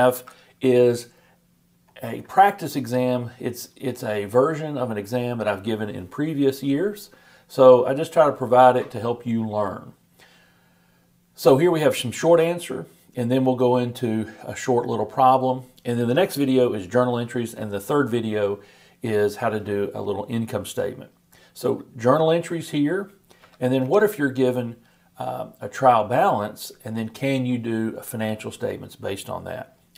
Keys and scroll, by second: 0.1 super+Tab.